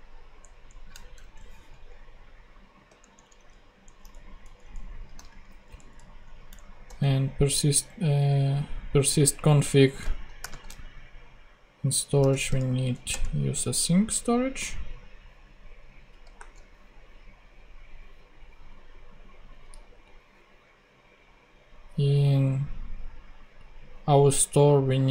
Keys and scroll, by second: 0.4 shift+Down, 1.1 shift+BackSpace, 1.9 BackSpace, 2.9 shift+Down, 4.0 alt+shift+Down, 4.1 alt+shift+Up, 5.2 alt+shift+super+Up, 5.4 alt+shift+super+Right, 5.9 Up, 6.5 super+Down, 6.8 Return, 10.4 shift+;, 10.4 shift+space, 12.3 shift+a, 13.0 shift+Return, 13.6 super+Return, 16.3 ;.